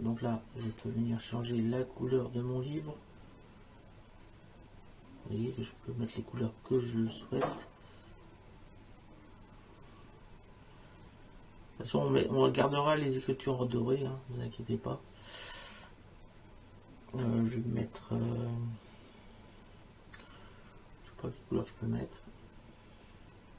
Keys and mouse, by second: 0.8 click.